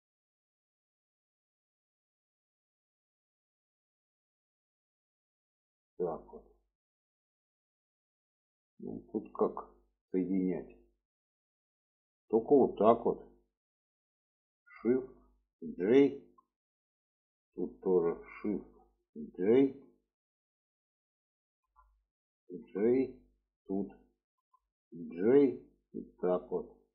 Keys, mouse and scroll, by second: 0.1-1.5 drag, 2.2 click, 3.1-5.2 drag, 5.5 click, 6.5 alt+z, 7.1 middle click, 7.9 middle click, 9.0 middle click, 10.0 middle click, 10.8 middle click, 12.1 click, 14.7 shift+click, 16.2 j, 17.3 drag, 18.2 shift+click, 19.7 j, 20.5 drag, 21.4 click, 23.3 click, 24.2 click, 26.0 click.